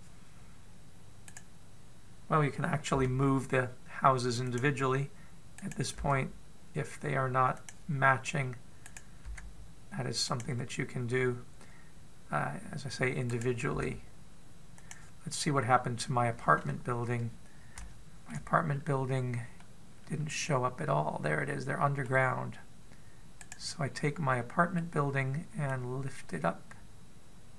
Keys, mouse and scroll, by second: 2.1 right click, 3.8 g, 6.4 right click, 6.9 g, 9.7 right click, 10.1 g, 14.1 right click, 14.6 g, 16.3-16.8 scroll up 1, 16.8-17.6 scroll down 1, 18.6 shift+middle click, 19.5 scroll up 1, 20.4 middle click, 24.3 right click, 24.8 middle click, 26.6 click.